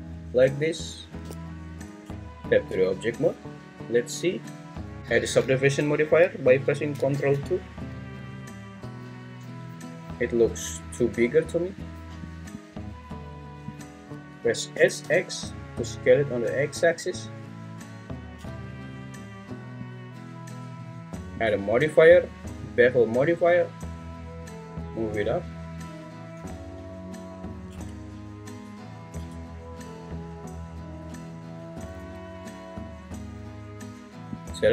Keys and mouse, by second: 0.9 shift+click, 2.0 Tab, 7.3 ctrl+2, 8.2 `, 11.0 `, 14.7 s, 15.0 x, 19.9 click, 21.5-23.0 drag, 24.4-26.0 drag, 27.7 Tab, 29.1 Tab, 32.0 `.